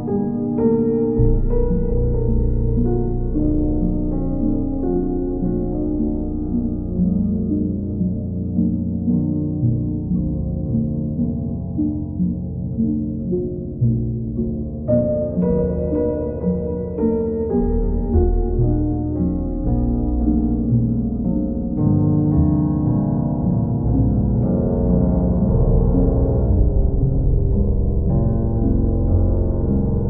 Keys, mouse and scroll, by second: 0.2 alt+click, 2.6 ctrl+click, 2.8 ctrl+click, 4.4 click, 4.8 click, 5.3 shift+click, 5.5 shift+click, 5.9 click, 6.3 shift+click, 8.4 click, 9.1 click, 9.4 shift+click, 9.6 ctrl+click, 10.2 ctrl+click, 10.7 w, 12.9 click, 13.4 click, 13.9 shift+click, 14.6 shift+click, 18.3 click, 20.9 click, 21.3 shift+click, 21.8 ctrl+click, 22.5 ctrl+click, 23.9 ctrl+click, 26.0 click, 26.5 ctrl+click, 27.2 click.